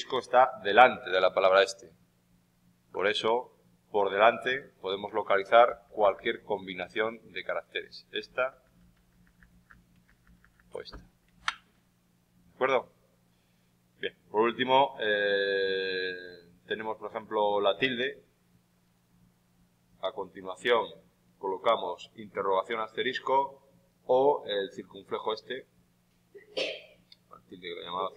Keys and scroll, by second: 5.6 shift+Left, 10.0 shift+Right, 11.2 shift+Left.